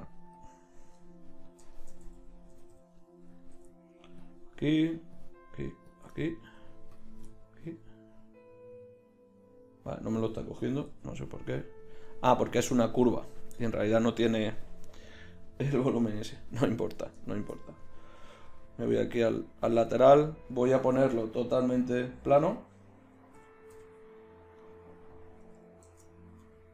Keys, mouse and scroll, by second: 1.0 click, 2.5 o, 2.7 o, 3.4 right click, 4.2 click, 6.2-8.8 middle drag, 8.8 click, 10.9 g, 16.5 click, 18.8 KP_3, 21.1 a, 21.1 a, 23.0 s, 25.9 shift+Tab, 26.3 s.